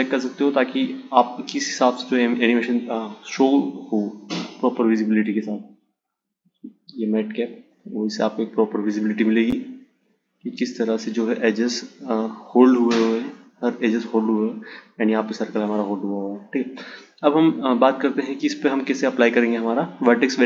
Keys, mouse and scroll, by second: 7.7 click.